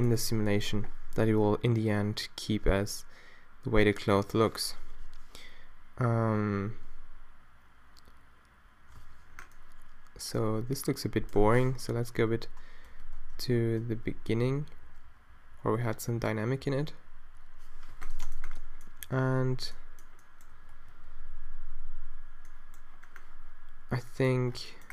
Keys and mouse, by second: 0.9-1.9 Right, 2.5 Right, 3.1 Right, 3.7 Right, 4.3 Right, 4.9 Right, 6.3 alt+a, 9.3 alt+a, 9.5 middle click, 12.0 shift+Down, 12.2 shift+Down, 13.0 Down, 14.0-17.3 Right, 19.1-19.4 Left, 20.6-22.2 Right.